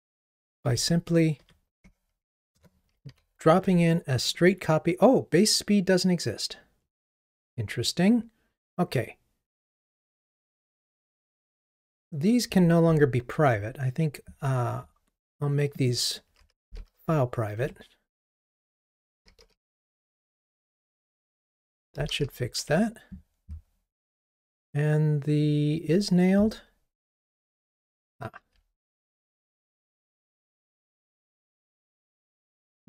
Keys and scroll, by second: 0.6 super+c, 0.7 alt+Up, 3.1 super+v, 17.6 Escape, 32.2 Escape.